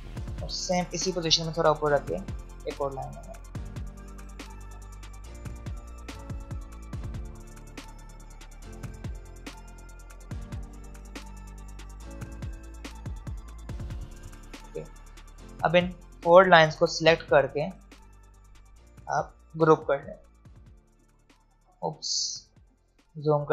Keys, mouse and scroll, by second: 2.2-14.6 drag, 14.6 v, 16.8 shift+click, 22.1 alt+scroll up 1, 23.4 click.